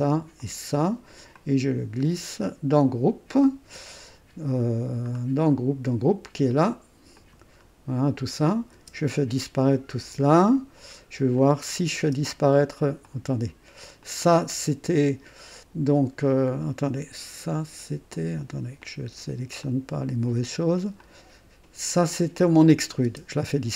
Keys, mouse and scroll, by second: 0.4 ctrl+click, 1.3-2.9 ctrl+drag, 4.4 scroll up 2, 5.1-5.9 scroll down 4, 7.1 click, 7.5 scroll down 1, 8.7 space, 11.3 click, 12.0 space, 13.0 click, 14.0 click, 15.8 scroll up 1, 18.1 click, 19.0 click, 19.6 click, 21.0 click, 23.0 space.